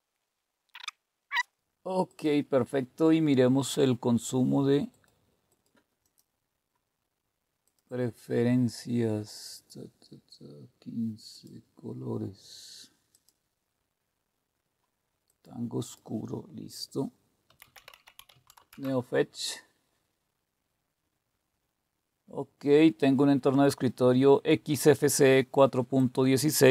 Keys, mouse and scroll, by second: 0.2 click, 0.4 click, 0.9 click, 1.2 click, 2.1 click, 4.9 click, 5.5 click, 6.0 click, 7.6 click, 11.3 click, 13.1 click, 15.3 click, 15.8 click, 17.2-19.2 typing, 20.3-21.0 typing, 23.0-24.5 drag, 26.0 click.